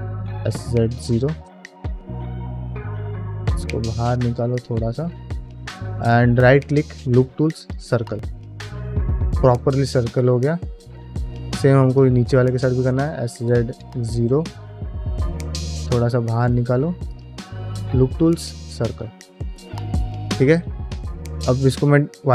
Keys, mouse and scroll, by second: 0.0 s, 2.1 s, 4.7 middle click, 5.8-7.7 right drag, 8.1-8.8 scroll down 2, 8.5 middle click, 9.0 middle click, 9.4 shift+middle click, 9.9 shift+middle click, 10.3 shift+middle click, 10.7 middle click, 11.7 alt+click, 12.2 s, 14.6 middle click, 15.6 s, 17.2-18.4 right drag, 18.8-19.5 scroll down 3, 19.2 middle click, 19.6 shift+middle click, 20.0-20.5 scroll up 2, 20.5 ctrl+Tab, 21.1 q.